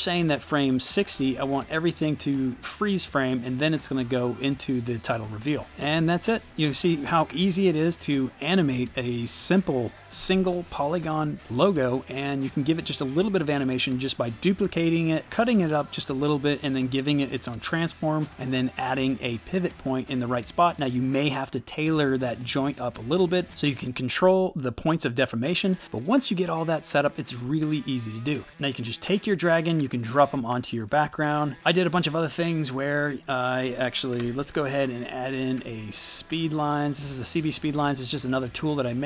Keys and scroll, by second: 5.7 space, 6.5 space, 34.2-36.5 typing.